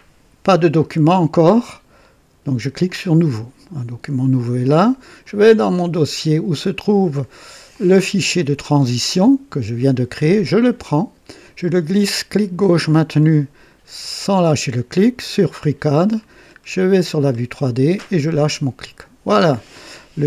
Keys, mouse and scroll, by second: 2.8 click, 5.2 click, 7.7 click, 10.6-12.6 drag, 12.8-18.4 drag.